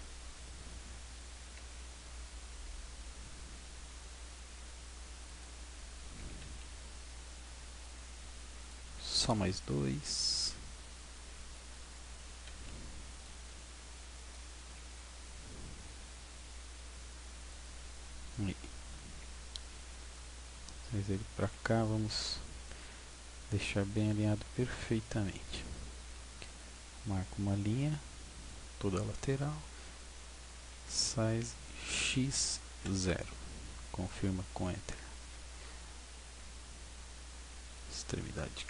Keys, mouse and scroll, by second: 1.5 g, 5.4 click, 6.3 a, 6.5 b, 9.2 g, 11.5 click, 12.3 a, 12.6 b, 14.8 g, 17.6 click, 18.3-19.2 scroll up 1, 20.1 shift+middle click, 21.6 scroll up 1, 22.2-23.3 scroll down 1, 23.9 scroll up 1, 24.7 a, 26.1 b, 30.9 s, 34.3 click, 35.7 a, 36.3 b.